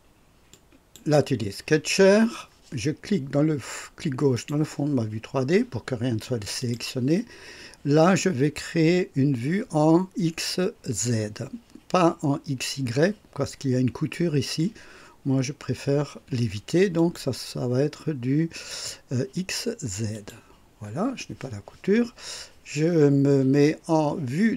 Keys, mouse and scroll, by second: 0.4 click, 4.3 click, 6.5 click, 16.9 click, 20.1 click.